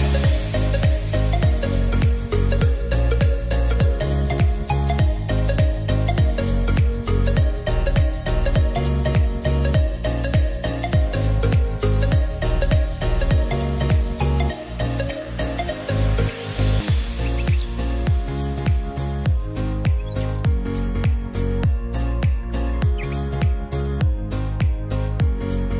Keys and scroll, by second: 6.5-9.3 typing, 24.1-25.2 typing.